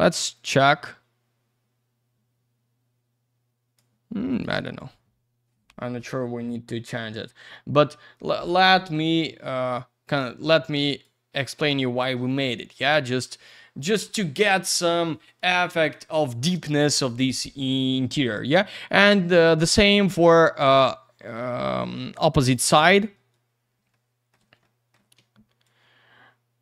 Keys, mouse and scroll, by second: 0.3 click, 4.3 click, 4.4 click, 8.5 click, 8.7 click, 10.8 click, 11.0 click, 20.1 click, 22.2 middle click, 22.4 middle click, 23.3 middle click, 23.6 scroll down 1, 23.9 alt+middle click, 24.7 alt+middle click, 25.6 shift+click.